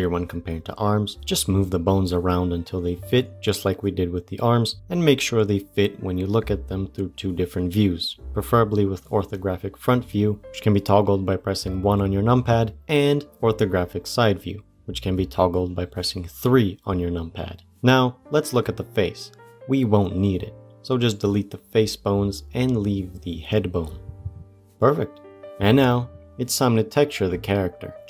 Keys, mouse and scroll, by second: 2.0 shift+click, 3.1 g, 5.9 shift+middle click, 6.5 shift+click, 7.4 c, 9.0 g, 11.4 g, 12.7 KP_3, 13.1-13.4 scroll up 1, 13.4 shift+middle click, 14.2 shift+click, 15.3 g, 17.6-17.9 scroll up 1, 19.3 shift+click, 19.7-21.1 middle drag, 21.1 Delete, 22.8-25.4 middle drag.